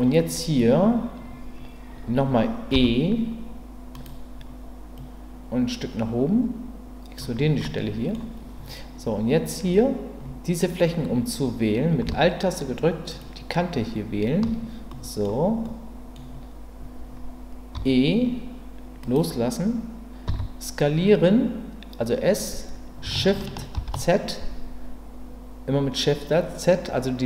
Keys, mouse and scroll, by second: 2.7 e, 4.9-7.2 drag, 7.6 middle click, 13.1 alt+click, 14.9 middle click, 15.7 middle click, 17.7 e, 19.0-20.2 right drag, 20.2 s, 23.7 shift+z.